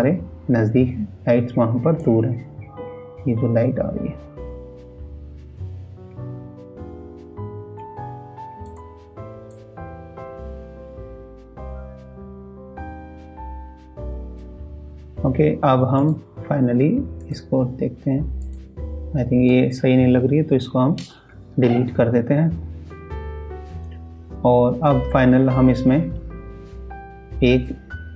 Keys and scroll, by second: 10.4 ctrl+s.